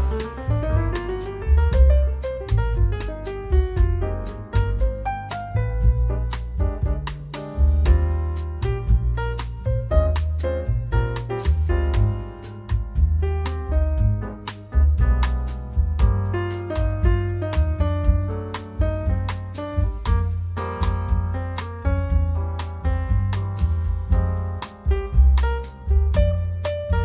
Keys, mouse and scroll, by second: 0.0-0.3 scroll up 2, 0.9-2.0 scroll down 4, 3.1-4.2 drag, 5.3 click, 6.0 click, 6.6-8.7 drag, 9.0-9.6 scroll up 3, 9.9-10.3 scroll down 1, 10.4-12.6 drag, 12.7-13.1 scroll down 1, 13.2-17.0 drag, 17.1 scroll down 1, 17.8-19.0 drag, 19.3-20.7 drag, 22.1 click, 23.6-24.8 scroll up 3, 25.7 click, 26.4-27.0 drag.